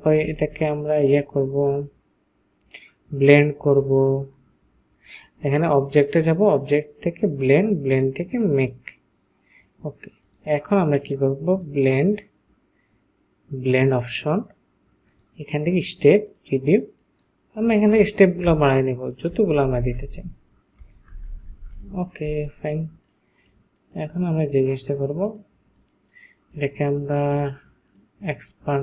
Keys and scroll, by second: 18.6 Up, 19.4 Up, 19.6 Up, 19.8 Up, 20.0 Up, 20.1 Up, 21.1 Up, 21.3 Up, 21.4 Up, 21.5-22.3 typing.